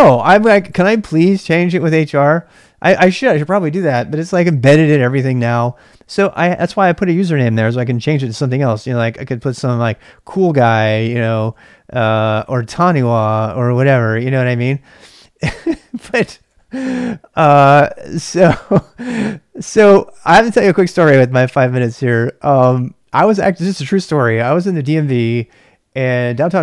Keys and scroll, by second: 8.9-12.8 typing, 14.1-16.9 typing.